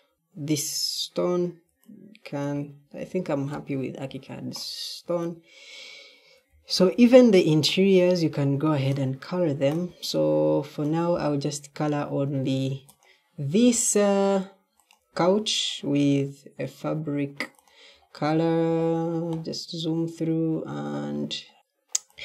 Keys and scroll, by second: 6.4 w, 6.8 w.